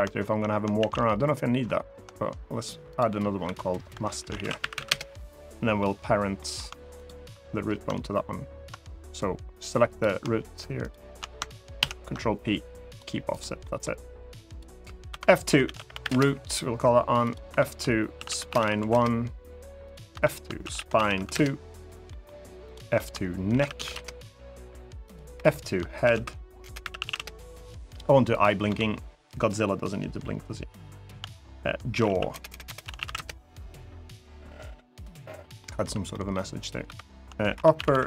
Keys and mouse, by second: 0.5 shift+a, 2.7 click, 3.2 F2, 5.5 middle click, 6.1 middle click, 9.6 click, 10.5 shift+click, 11.5 ctrl+p, 13.1 click, 13.3 middle click, 14.3 click, 14.8 F2, 15.6 o, 17.0 click, 17.2 F2, 19.8 F2, 21.8 middle click, 22.6 F2, 24.8 click, 25.1 F2, 28.1 click, 28.4 F2, 32.2 BackSpace, 32.4 BackSpace, 35.3 middle click, 35.8 middle click, 36.6 F2, 37.6 p.